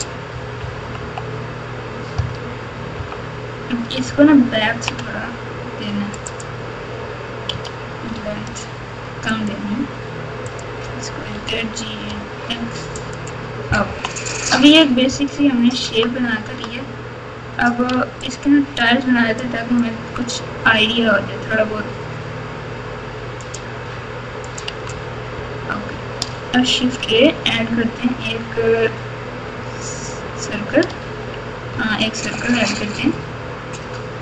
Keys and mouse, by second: 0.6 KP_2, 0.8 KP_2, 1.0 KP_2, 2.1 KP_4, 2.9 KP_2, 4.0-4.8 ctrl+KP_2, 7.5 g, 9.3-10.6 x, 10.4 click, 11.3 g, 13.8 KP_3, 15.8 Tab, 16.4 Tab, 17.9 alt+z, 18.4 click, 19.3 click, 19.6 click, 20.6 g, 24.4 click, 24.6 Tab, 26.8 shift+a, 31.7 shift+a.